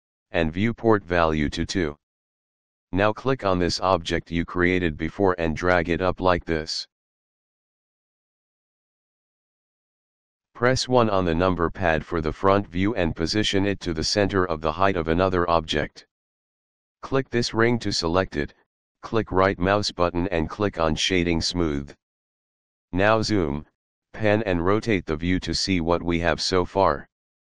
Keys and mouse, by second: 0.4 click, 4.4 click, 7.1 click, 12.4 KP_1, 15.1 click, 16.8 click, 19.2 right click, 20.5 click, 22.5 middle click, 24.2 shift+middle click, 25.5 middle click.